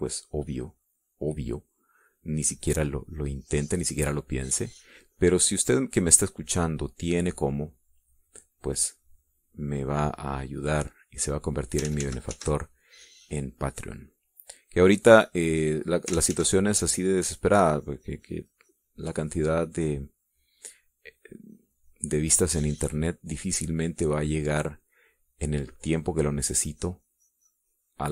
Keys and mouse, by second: 3.5-13.4 drag, 13.5 ctrl+z, 14.4-17.8 ctrl+drag, 17.8 ctrl+z, 18.8-28.1 drag.